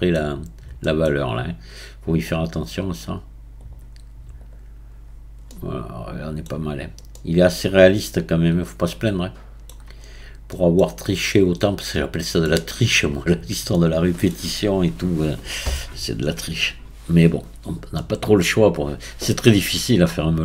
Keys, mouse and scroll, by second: 0.4-0.9 scroll down 1, 0.9-3.8 middle drag, 3.8-5.1 right drag, 5.1-5.5 scroll down 1, 5.5-6.7 middle drag, 6.7-7.2 scroll down 2, 7.2-10.0 middle drag, 10.0-10.5 scroll up 4, 10.5-20.4 middle drag.